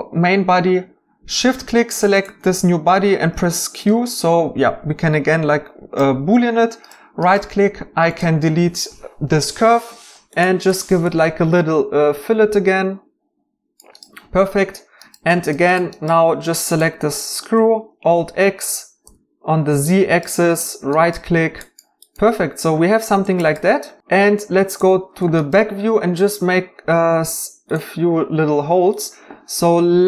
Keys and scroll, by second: 3.3 q, 9.2 x, 19.0 alt+z.